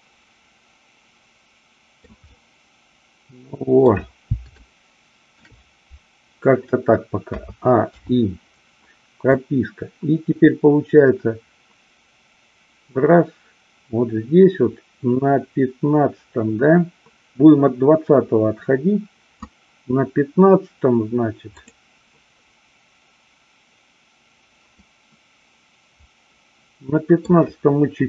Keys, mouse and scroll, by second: 2.2-3.8 middle drag, 4.6-5.4 shift+middle drag, 7.2 a, 8.0 i, 9.4-19.5 drag, 24.7-27.2 middle drag.